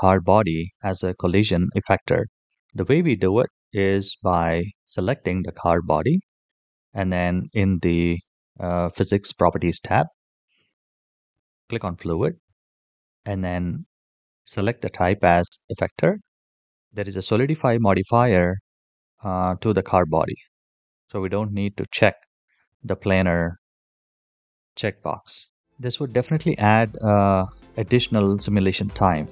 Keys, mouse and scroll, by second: 4.3 click, 11.1 click, 12.9-15.7 drag, 16.3 click.